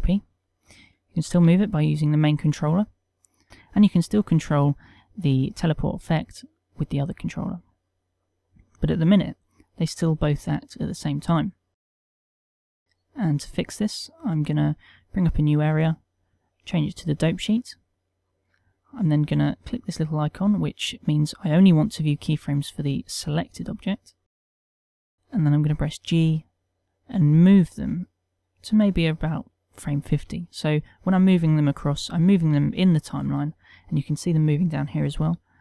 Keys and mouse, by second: 1.0 click, 2.0 g, 3.1 right click, 4.5 click, 4.5 g, 7.7 right click, 9.8 click, 15.3 click, 16.6 click.